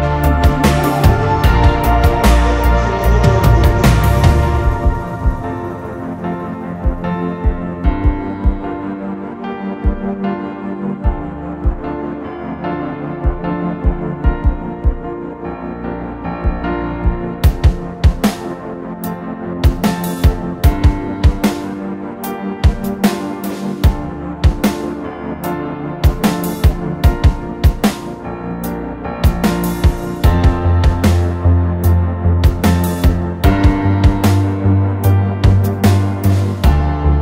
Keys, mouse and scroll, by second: 3.3-3.8 typing, 5.0 double click, 9.5 typing, 12.6 double click, 16.0 double click, 23.3 typing, 26.0 double click, 30.1 typing, 35.3 typing.